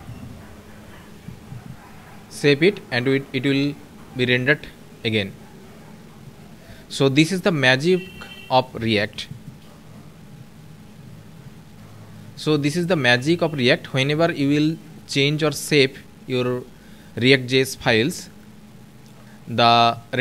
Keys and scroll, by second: 0.8 ctrl+s.